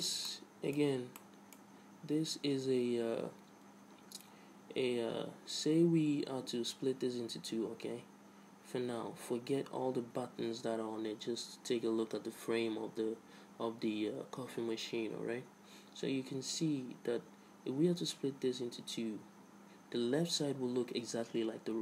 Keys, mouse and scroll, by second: 1.3-3.1 middle drag.